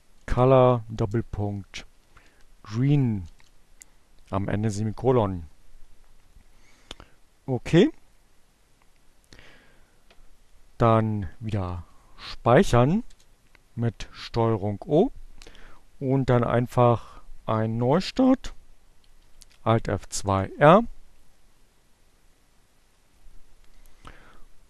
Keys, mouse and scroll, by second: 0.0-1.7 typing, 8.5 ctrl+o, 11.1 Return, 16.3 alt+F2.